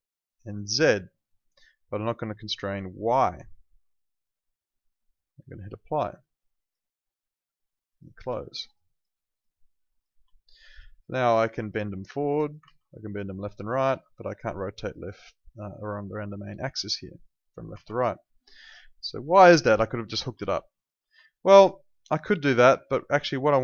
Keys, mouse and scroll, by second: 6.6 click, 8.3 alt+middle click, 8.6 alt+right click, 8.8 alt+click, 10.3 alt+right click, 11.7 click, 12.6 ctrl+z, 13.0 click, 13.8 ctrl+z, 14.4 click, 17.8 z, 18.1 alt+right click, 18.4 alt+middle click, 18.9 alt+click, 19.5 alt+middle click, 19.7 alt+right click, 20.5 alt+middle click, 20.7 alt+right click, 21.2 alt+click, 21.5 alt+right click, 21.9 alt+middle click, 22.2 alt+click.